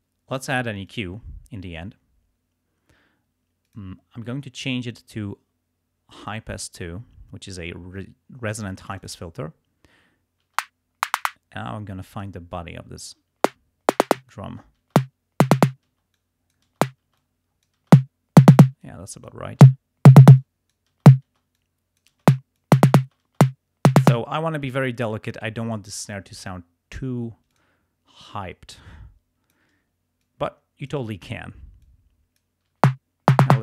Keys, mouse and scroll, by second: 0.8 click, 3.6 click, 6.1 click, 8.9 click, 10.5 space, 11.2-12.4 drag, 13.0 space, 14.0 click, 14.5 space, 15.9 space, 16.1 click, 16.6 click, 16.9 space, 17.1 click, 17.9 space, 18.6 space, 18.8 click, 19.6 space, 20.3 space, 20.4 click, 21.5 click, 22.2 space, 22.7 click, 22.9 click, 23.1 space, 24.0 space, 27.5 click, 28.2-29.7 drag, 30.2 click, 31.8 click, 32.7 space, 33.5-33.6 drag.